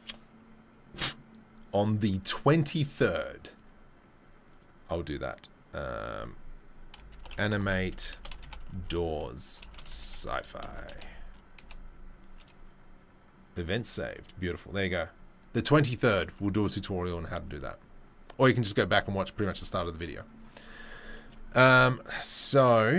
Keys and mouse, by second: 18.1-21.0 drag, 21.0 shift+right click, 21.6-22.9 middle drag, 22.0 Tab.